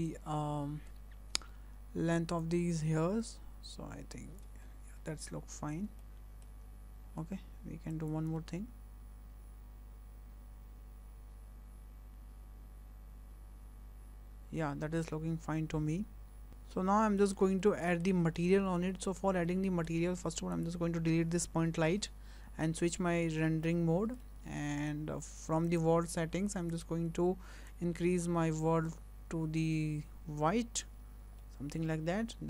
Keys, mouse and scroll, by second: 0.4-1.3 scroll up 13, 2.4 click, 4.7 scroll down 2, 5.0-5.4 scroll up 3, 6.0 shift+middle click, 6.6-7.9 scroll down 2, 7.9 click, 8.4 space, 14.9-16.2 scroll down 4, 16.5 click, 16.5 space, 17.1 shift+middle click, 17.4 scroll up 2, 17.7 shift+middle click, 18.1 scroll up 2, 18.4 shift+middle click, 19.6-20.5 scroll down 5, 20.5 click, 21.6 Delete, 23.0 click, 23.9 scroll up 3, 24.3 shift+middle click, 25.7 click, 26.7 click, 31.2 scroll down 2, 31.6 shift+middle click, 32.1 scroll up 1, 32.3 shift+middle click.